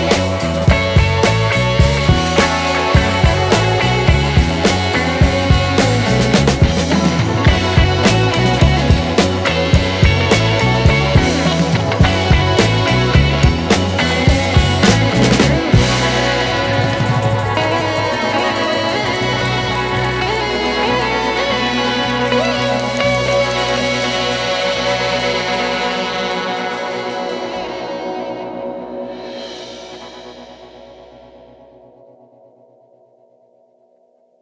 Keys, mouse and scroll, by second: 6.1 alt+right click, 6.7 alt+right click, 7.2 alt+right click, 8.3 alt+right click, 13.1 alt+right click, 15.0 alt+right click, 17.6 alt+right click, 17.8 alt+right click, 17.9 alt+right click, 18.8 alt+right click, 19.5 alt+right click, 20.3 alt+right click, 20.8 alt+right click, 22.9 alt+right click, 23.3 alt+right click, 24.0 alt+right click, 25.6 alt+right click, 26.0 alt+right click, 26.8 alt+right click, 28.5 alt+right click, 29.0 alt+right click, 29.5 alt+right click, 30.5 alt+right click, 30.9 alt+right click, 31.1 alt+right click, 31.7 alt+right click, 33.7 alt+right click, 34.1 alt+right click.